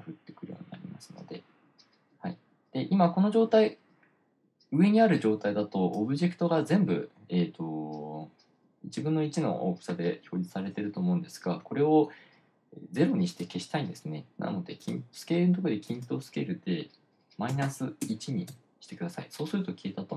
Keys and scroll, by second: 17.9-18.5 typing, 18.9 Return.